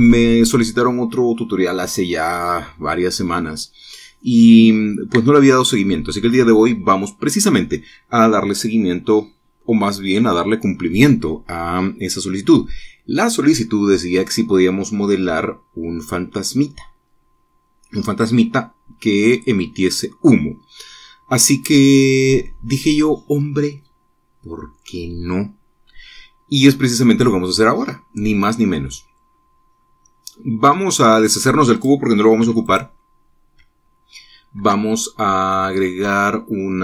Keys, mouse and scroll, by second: 28.7-31.0 drag, 32.3 click, 32.9 x, 33.2 click, 35.1 shift+a.